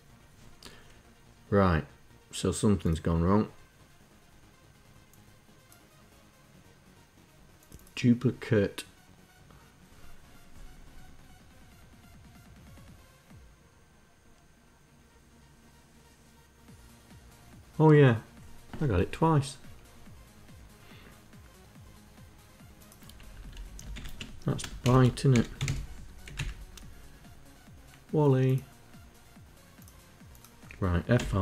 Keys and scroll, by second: 22.5 Left, 22.8 Left, 23.3 shift+End, 24.2-25.6 typing, 25.7 Down, 25.8 Up, 30.6 F5.